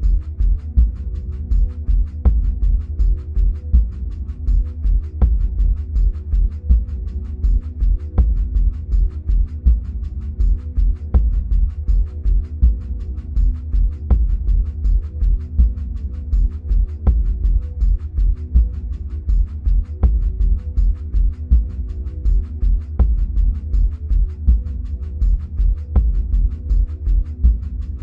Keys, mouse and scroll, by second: 4.0-9.9 drag, 13.1-13.5 drag, 17.5-20.5 middle drag, 20.5-24.0 drag, 24.0-28.0 middle drag, 24.8-25.5 scroll up 2, 27.9-28.0 scroll up 2.